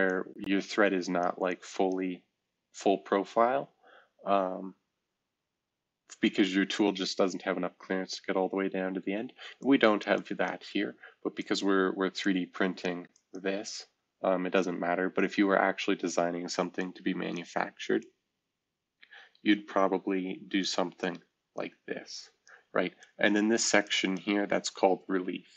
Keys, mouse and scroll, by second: 9.5 shift+click.